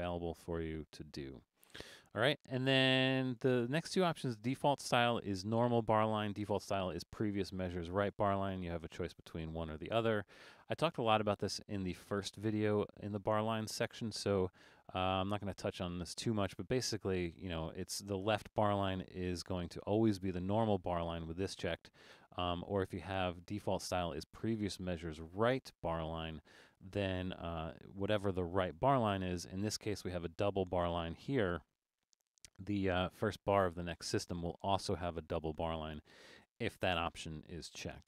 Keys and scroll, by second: 31.6 super+=, 32.0 super+=, 36.6 alt+super+a.